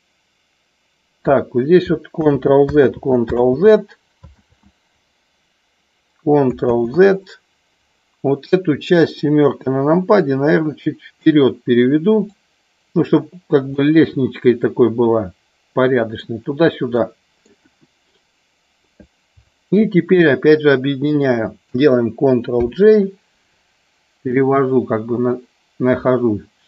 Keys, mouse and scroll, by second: 2.1 ctrl+z, 2.9 ctrl+z, 4.4 ctrl+z, 9.0 KP_7, 10.2 click, 12.2 click, 13.7 scroll up 1, 13.8-16.3 middle drag, 16.9 scroll up 1, 17.0 middle click, 17.6 KP_1, 22.5 ctrl+j, 24.2-26.6 drag.